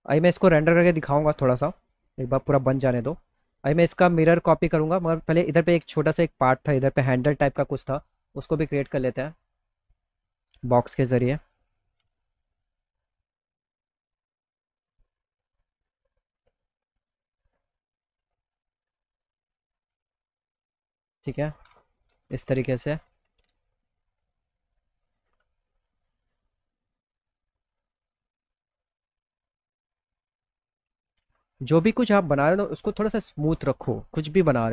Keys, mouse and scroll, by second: 0.1 alt+middle click, 3.6 click, 5.4 click, 7.9 click, 8.6 click, 9.2 click, 10.0 middle click, 10.4 alt+middle click, 11.5 g, 12.1 middle click, 12.5 middle click, 12.7 middle click, 13.0 middle click, 13.7 middle click, 14.1 middle click, 15.1-16.6 drag, 17.1 click, 17.4 click, 17.4 right click, 17.7 middle click, 18.5 click, 18.5 right click, 19.2 F3, 19.4 F3, 19.7 F3, 20.2 middle click, 20.5 middle click, 21.3 middle click, 21.8 z, 21.9 alt+middle click, 22.4 middle click, 22.7 alt+middle click, 23.5-24.6 drag, 24.8 F3, 25.1 middle click, 25.2 middle click, 25.4 alt+middle click, 26.4 alt+middle click, 27.7-29.7 drag, 30.0 middle click, 30.3 middle click, 30.6 alt+middle click, 31.0 middle click, 31.4 alt+middle click, 32.3 click, 33.2 click, 33.9 e.